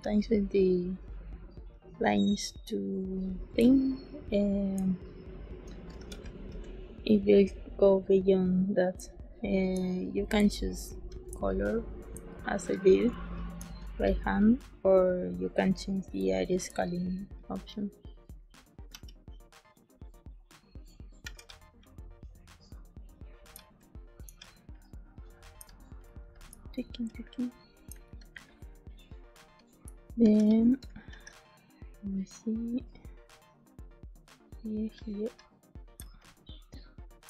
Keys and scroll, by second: 3.5 ctrl+space, 5.9 z, 8.9 space, 10.3 ctrl+space, 12.1 space, 16.1 space, 18.8 e, 21.1 b, 23.5 space, 25.5 space, 27.8 ctrl+space, 30.1 b, 31.0 b, 35.9 ctrl+space.